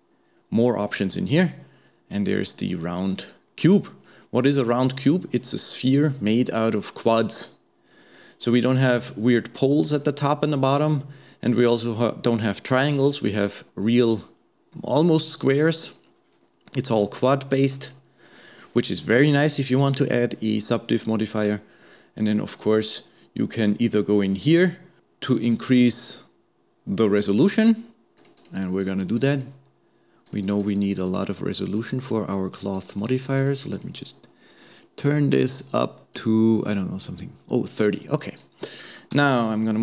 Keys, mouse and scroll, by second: 4.3-7.6 scroll up 2, 17.8 click, 25.0-36.7 drag, 38.4 click, 39.1 g.